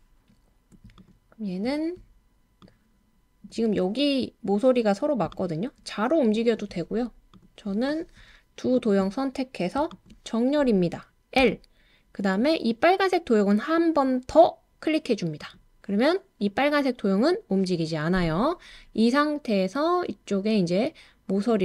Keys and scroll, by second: 5.5-6.2 typing.